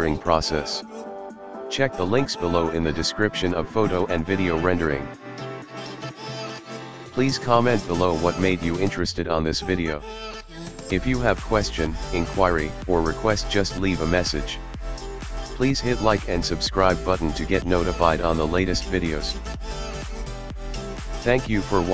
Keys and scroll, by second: 9.1 Escape, 10.8 i, 10.9 o, 14.8 Escape.